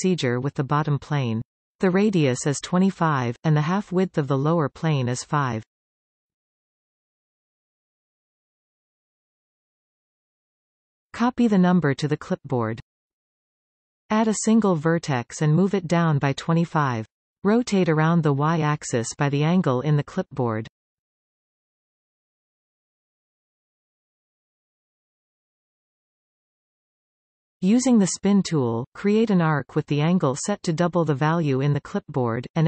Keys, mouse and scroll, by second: 14.5 shift+a, 16.8 g, 23.8 r, 28.9 click, 30.5-32.6 drag.